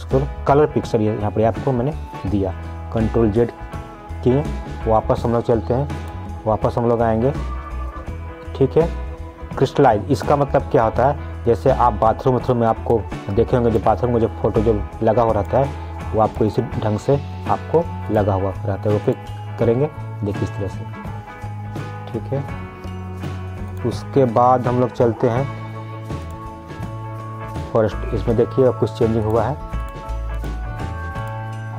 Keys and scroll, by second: 3.0 ctrl+z, 22.5 ctrl+z.